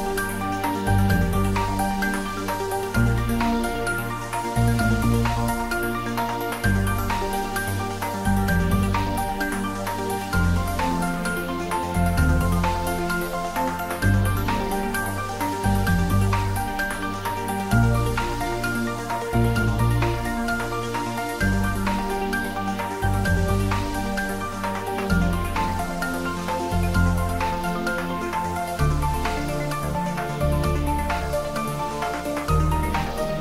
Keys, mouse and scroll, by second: 4.8 click, 5.8 scroll down 1, 6.4-7.6 middle drag, 10.3-11.3 scroll up 1, 11.9-13.2 middle drag, 17.7-18.3 scroll down 1, 20.0-22.3 middle drag, 22.7 click, 23.5-24.5 scroll down 1, 27.0 click, 28.0-28.5 scroll down 1, 28.5-29.7 middle drag, 29.9 shift+click, 33.0-33.4 middle drag.